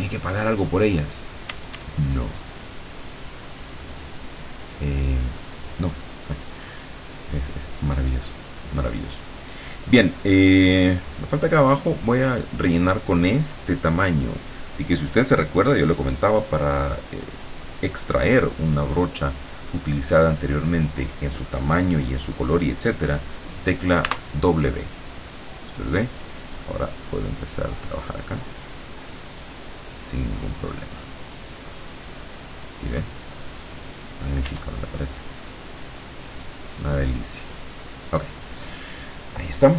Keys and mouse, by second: 1.5 d, 2.1-6.3 drag, 7.5-8.6 middle drag, 24.1 w, 27.3-30.1 drag, 31.6-33.6 drag, 34.5 e, 35.4-38.5 drag, 39.1 middle click.